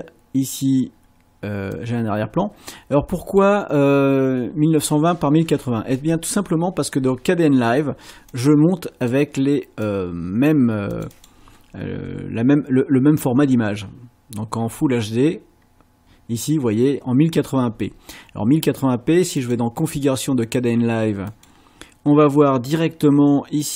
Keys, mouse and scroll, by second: 1.7-3.6 drag, 8.3 click, 9.9 click, 10.9 click, 19.4 click, 21.3 click.